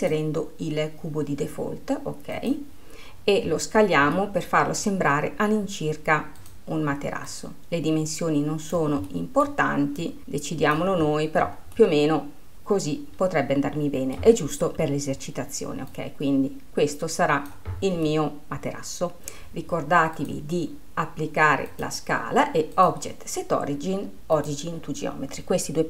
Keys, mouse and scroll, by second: 0.0-3.0 drag, 4.2-6.5 middle drag, 6.5-7.5 drag, 9.2 middle click, 10.1 click, 11.9-14.7 middle drag, 15.9 click, 18.1-19.2 middle drag, 20.2-25.8 drag.